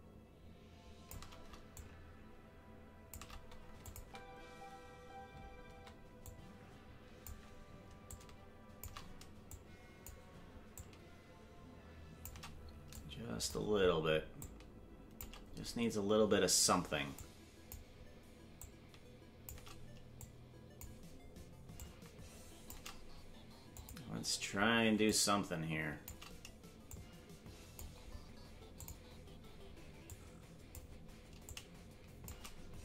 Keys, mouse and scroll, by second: 1.7-3.2 drag, 3.8-5.2 drag, 4.0 space, 6.2-7.3 drag, 6.2 space, 8.1 click, 9.5 click, 10.7-12.3 drag, 12.9 click, 14.4 click, 17.2 click, 18.6 click, 20.2 click, 21.7-22.7 drag, 23.8 click, 25.0-26.1 drag, 26.9 click, 28.7 click, 30.1 click, 31.4 click.